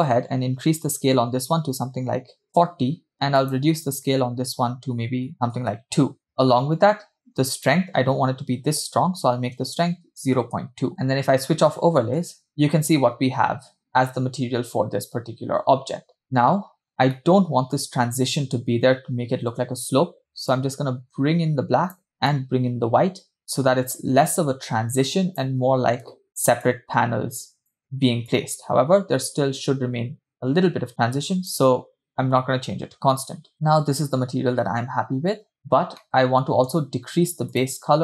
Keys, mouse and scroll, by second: 3.5-6.0 drag, 6.3 middle click, 7.6-10.8 drag, 10.9 click, 12.4 space, 16.2 space, 16.9-17.2 scroll up 2, 17.4-19.1 shift+middle drag, 20.8-22.1 drag, 22.5-25.7 drag, 26.6 click, 28.5-31.8 drag, 32.9-34.1 scroll down 3, 33.5 space, 34.1 space, 35.6 space, 36.2 middle click, 37.6 click.